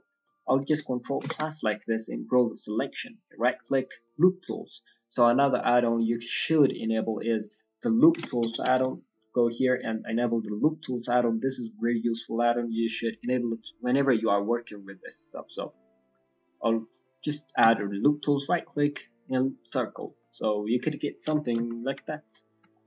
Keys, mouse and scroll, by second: 0.0 middle click, 1.2 ctrl+KP_Add, 2.9 right click, 5.2 click, 18.1 right click, 20.2 middle click, 20.8-21.2 scroll down 3, 21.2 KP_1, 21.5 KP_3, 21.8 KP_1, 22.1-22.4 scroll up 3, 22.7 shift+middle click.